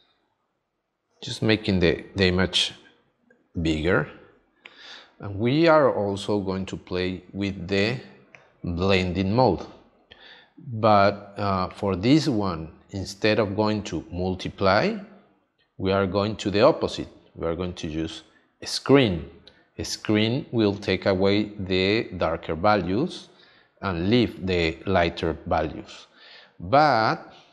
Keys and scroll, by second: 6.1 space.